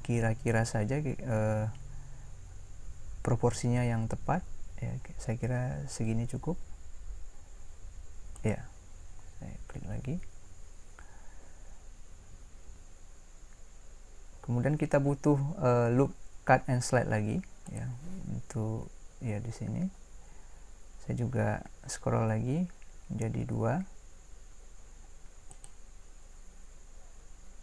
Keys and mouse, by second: 17.7-19.5 drag.